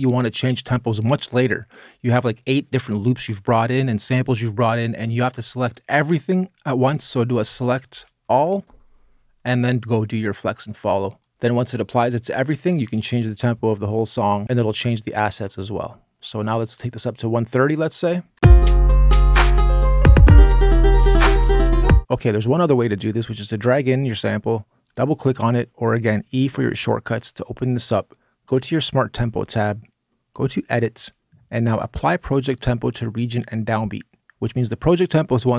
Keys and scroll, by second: 7.7 super+a, 18.1 space, 26.1 e, 26.4 e.